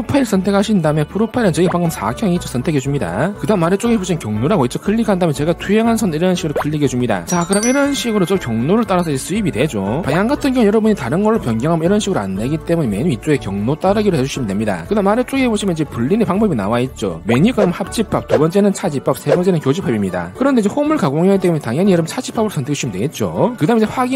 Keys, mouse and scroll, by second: 0.9 click, 1.7 scroll up 2, 3.1 click, 5.9 click, 7.1 click, 10.8 click, 11.7 click, 12.8 click, 14.6 click, 23.2 click.